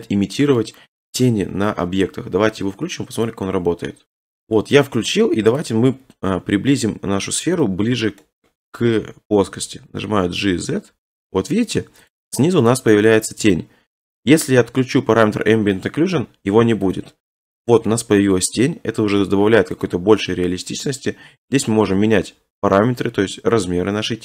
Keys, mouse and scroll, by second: 0.6-2.0 scroll, 2.6 scroll, 3.3 click, 4.8-5.6 scroll, 5.6 click, 5.8-6.8 scroll, 6.8 scroll, 9.4 g, 9.7 z, 12.1 right click, 12.3 scroll, 13.0 shift+middle click, 13.1 scroll, 14.3 shift+middle click, 15.9 click, 16.9 click, 17.9 middle click, 18.1 middle click, 18.2 middle click, 19.8 click.